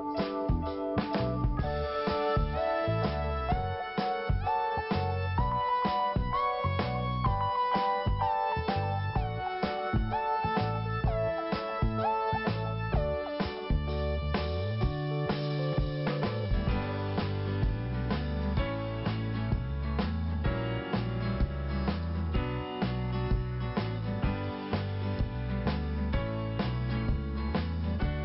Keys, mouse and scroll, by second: 0.8 right click, 1.5 scroll up 1, 2.6 click, 3.6 click, 3.7 click, 4.6 click, 5.2 click, 5.3 click, 6.8 click, 7.3 click, 9.9 click, 11.4 p, 12.4 click, 14.4 scroll down 1, 15.3 click, 17.5 click, 17.6 click, 19.1 t, 19.8 scroll down 1, 20.6 click, 21.9 scroll up 1, 22.8 click, 25.4 p, 26.2 click, 27.5 scroll down 1.